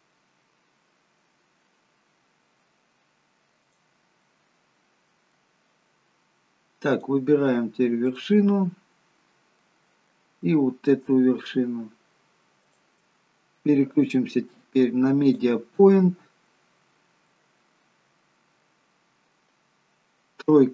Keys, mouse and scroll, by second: 4.3 middle click, 7.0 click, 8.0 click, 9.6 middle click, 10.1-11.1 scroll down 1, 12.7 shift+click, 13.9 click, 16.8-19.0 scroll down 2, 17.2 middle click, 19.0-19.8 scroll up 1, 19.8-20.5 scroll up 1, 20.5 KP_3.